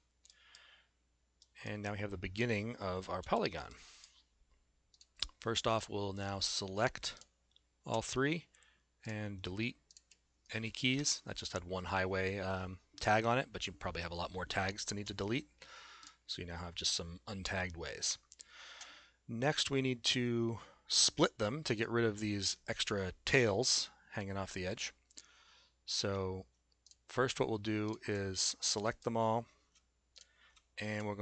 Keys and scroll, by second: 3.2 s.